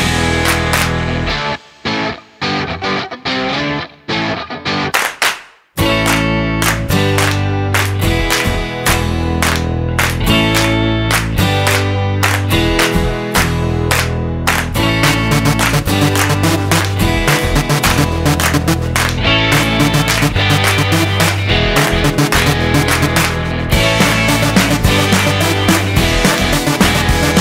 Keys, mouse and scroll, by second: 6.9-7.8 scroll up 1, 7.8 click, 13.4-13.9 scroll down 3, 13.9 middle click, 15.2 shift+a, 21.7 scroll up 2, 23.8-24.3 scroll up 7, 24.4 middle click, 26.1 click.